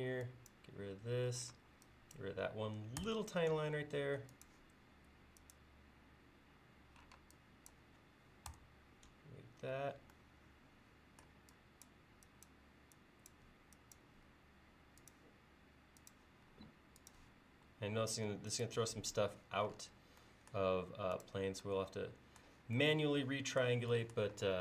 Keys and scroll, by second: 1.6 space, 3.0 BackSpace, 7.2 space, 8.5 BackSpace, 9.7 e, 14.3 l.